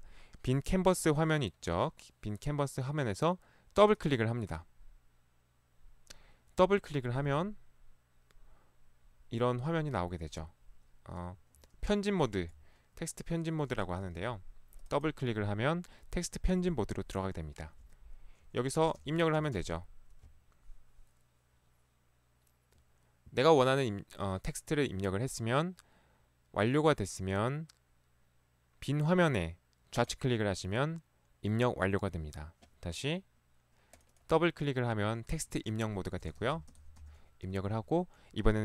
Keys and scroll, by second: 7.3 ctrl+4, 11.5 Escape, 12.4 Escape, 14.0 ctrl+4, 19.1-19.6 typing, 21.0 typing, 36.5-37.0 typing.